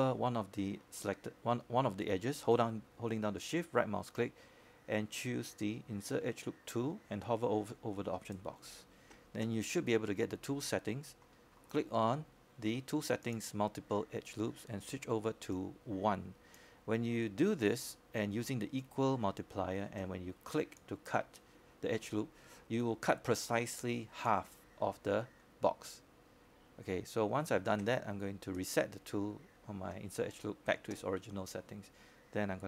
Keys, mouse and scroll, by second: 3.3-4.5 right drag, 6.3-8.9 scroll up 1, 9.7 shift+right click, 19.7-31.4 drag, 31.4-31.7 scroll down 1, 31.7-32.6 scroll up 1.